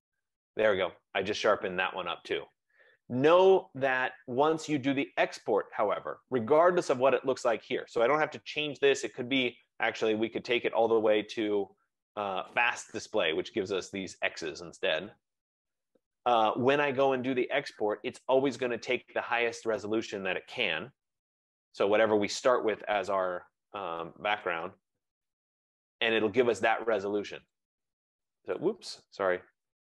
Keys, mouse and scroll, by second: 9.0 right click, 12.7 click, 19.1 click, 23.6 ctrl+=, 24.0 ctrl+=, 24.3 ctrl+=, 24.8 ctrl+=, 26.3-26.7 scroll, 27.0-27.7 scroll, 27.3 click, 29.4 ctrl+z.